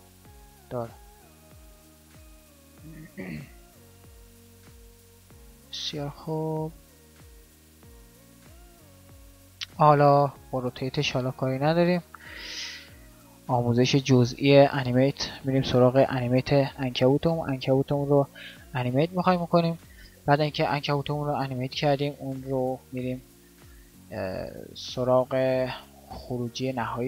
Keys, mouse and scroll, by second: 4.4 ctrl+z, 7.1 ctrl+z.